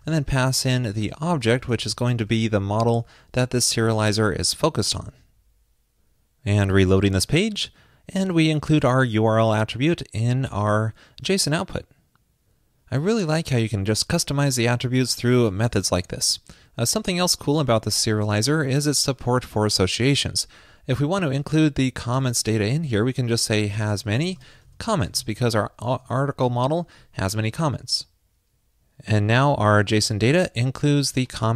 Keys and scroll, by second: 2.1 alt+shift+Left, 5.0 super+s, 21.0 super+Right, 26.0 super+s.